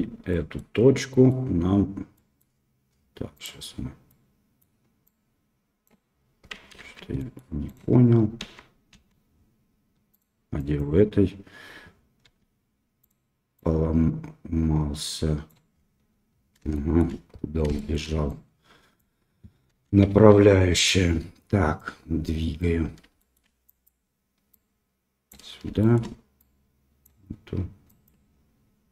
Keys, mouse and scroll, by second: 0.3 middle click, 1.1 middle click, 2.1 middle click, 3.3 right click, 4.0 middle click, 5.0 click, 6.7 ctrl+z, 7.1 middle click, 7.6 click, 8.4 a, 8.9 a, 10.1 click, 12.2 g, 13.5-15.6 drag, 16.7 shift+middle click, 17.7 shift+middle click, 18.2 click, 19.6 KP_1, 23.1 shift+middle click, 23.8-25.2 drag, 25.7 shift+middle click, 26.3 click, 27.9 click, 28.8 middle click.